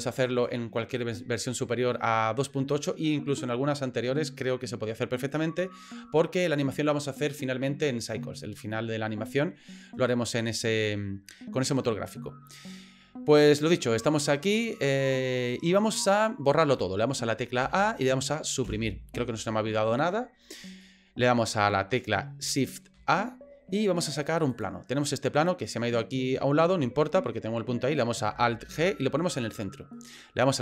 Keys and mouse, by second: 14.3-15.6 middle drag, 17.6 a, 18.7 Delete, 20.8 middle click, 22.9 shift+a, 28.6 alt+g, 29.5 middle click.